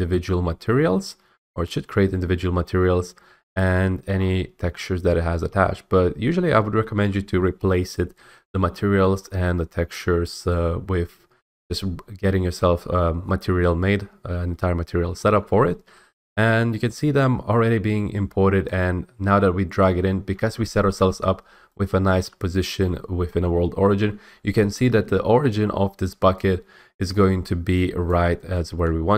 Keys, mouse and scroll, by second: 3.8-5.9 scroll, 15.4-15.7 scroll, 16.2-18.2 scroll, 19.9 click, 22.1-25.0 typing, 24.7 right click, 28.2 click, 28.8-29.1 typing.